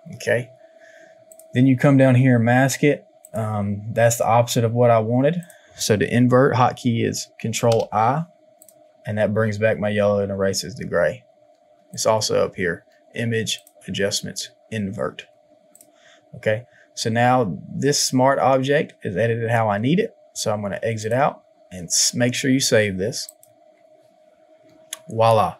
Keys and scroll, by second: 7.6 ctrl+i.